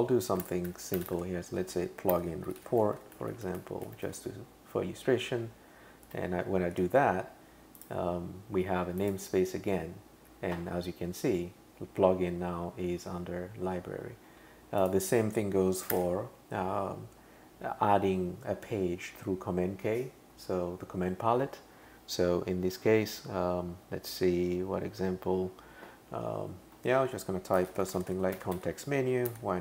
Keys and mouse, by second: 0.2-4.6 typing, 6.1 Return, 7.8 click, 9.0 click, 14.8 click, 15.9 super+k, 16.0-16.9 typing, 27.4-29.6 typing.